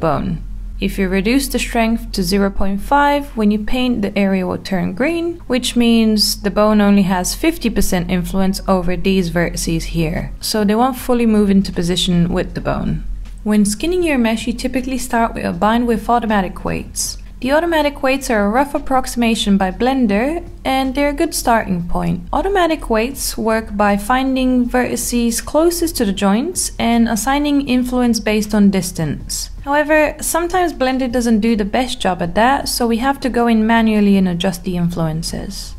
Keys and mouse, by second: 1.5-3.1 drag, 14.2 ctrl+click, 15.7 ctrl+p, 19.9 click, 20.5 click, 21.1 click, 21.8 click, 22.6 click, 24.3 click, 25.6 click, 26.1 click, 26.9 click, 28.4 click, 29.0 click, 29.9 click, 31.4 click, 32.8 click, 33.2 click, 35.4 shift+middle click.